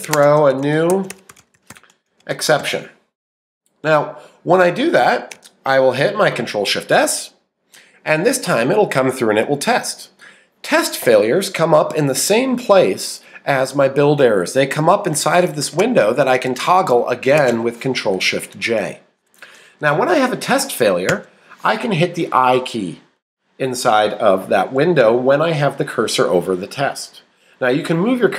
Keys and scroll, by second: 0.0-4.1 typing.